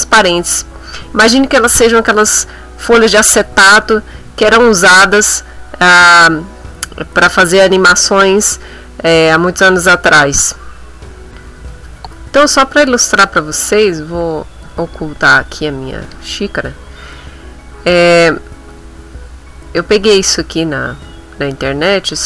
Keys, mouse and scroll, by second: 14.1 click, 14.5 click, 14.8 click, 15.9 click, 18.7 click, 19.6 middle click, 20.3 ctrl+middle click, 21.4 click.